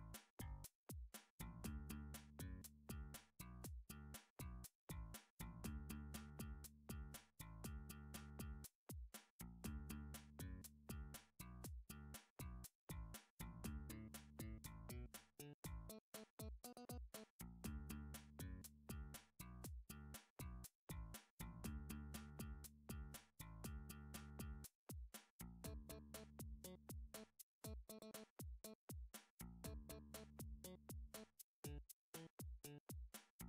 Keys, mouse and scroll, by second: 1.1 scroll, 2.4 shift+middle click, 3.1 g, 3.8 z, 5.7 right click, 6.4 click, 7.1 g, 10.9 typing, 12.4 click, 13.0 7, 13.8 Tab, 14.1-15.1 scroll, 15.1 click, 15.6 Tab, 16.6 middle click, 16.6 KP_7, 17.0 a, 19.5 Tab, 21.1 click, 22.1 click, 24.2 click, 25.0-25.8 scroll, 25.8 click, 26.9 click, 28.4 click, 31.4 middle click, 31.6-32.0 scroll down 3, 32.4 middle click, 32.4 scroll down 3, 33.3 7.